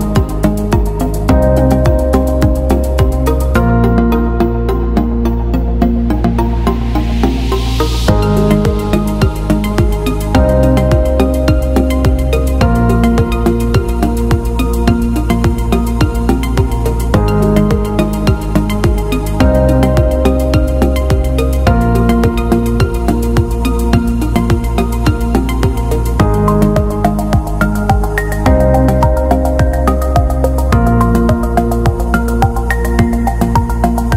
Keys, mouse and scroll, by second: 4.5 click, 6.6 click, 7.6 alt+shift+click, 9.7 click, 11.5 click, 12.9 alt+BackSpace, 13.9 click, 14.2-14.7 alt+scroll up 1, 17.4 click, 19.9 click, 21.7 alt+BackSpace, 22.7 t, 23.3 click, 29.4 click, 33.7-34.1 scroll down 1.